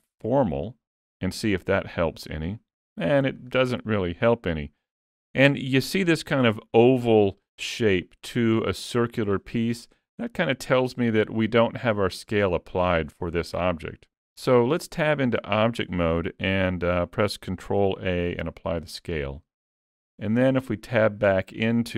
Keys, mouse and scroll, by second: 2.5 click, 14.9 Tab, 17.9 ctrl+a, 20.2 Tab.